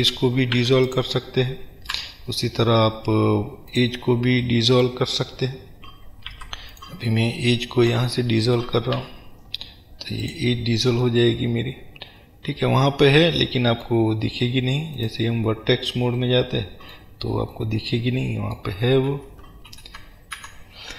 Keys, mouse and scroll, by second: 0.6 3, 1.0 click, 2.1 Delete, 4.5-6.9 middle drag, 6.4 2, 6.9 click, 9.1 Delete, 10.9-15.1 middle drag, 15.1 click, 16.3-20.9 middle drag, 19.2 ctrl+z.